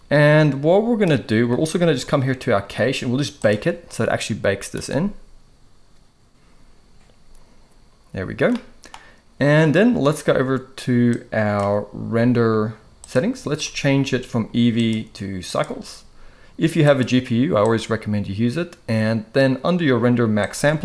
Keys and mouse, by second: 3.3-7.8 drag, 8.5 middle click, 11.2 click, 13.0 click, 14.7-15.6 drag, 16.8-17.8 drag, 20.5-20.8 drag.